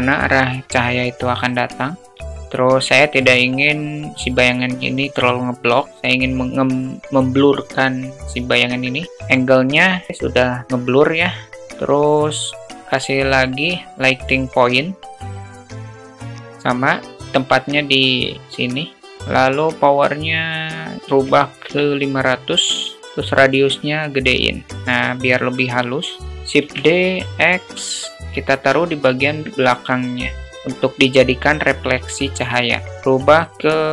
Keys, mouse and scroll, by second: 9.5 click, 10.6 drag, 11.5 shift+a, 14.8 click, 15.4 click, 15.7 g, 17.3 click, 19.0-21.3 drag, 21.0 0, 23.3-25.7 drag, 26.2 shift+d, 28.3-28.9 alt+middle drag, 29.5 click, 30.4-31.4 drag, 32.1 click, 32.8-33.9 drag.